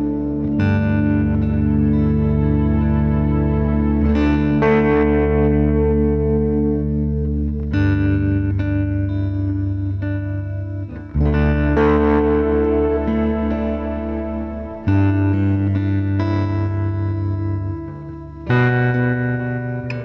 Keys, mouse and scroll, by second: 0.0-0.6 typing, 3.3-4.7 drag, 4.7-5.6 scroll down 6, 5.6-6.1 middle drag, 6.1-6.4 scroll up 1, 6.4-7.2 middle drag, 7.2 g, 8.3 click, 9.0 x, 9.6 click, 10.4 middle click, 10.8-11.3 scroll up 1, 11.3 Tab, 12.0 a, 12.4-13.7 shift+middle drag, 13.7 Tab, 13.9 Tab, 14.9 a, 15.8 e, 18.5 Tab, 18.9 scroll down 2, 19.0-19.6 middle drag, 19.6 `.